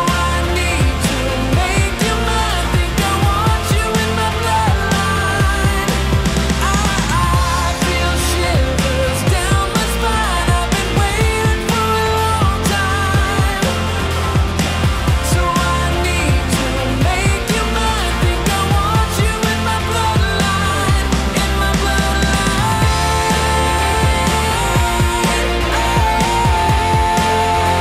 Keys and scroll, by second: 10.5 ctrl+z, 16.3 ctrl+z, 17.0 ctrl+z, 19.8 ctrl+z, 23.9 ctrl+z, 24.6 ctrl+z.